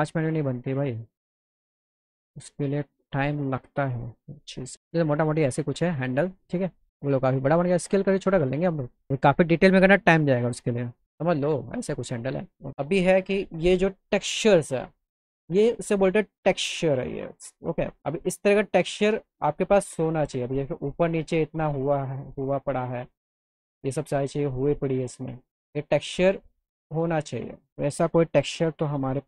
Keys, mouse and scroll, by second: 0.0 click, 2.2 click, 7.8 click, 9.4 click, 10.9 click, 11.3 click, 12.5 click, 23.9 ctrl+click, 25.7 alt+middle click, 28.6 click.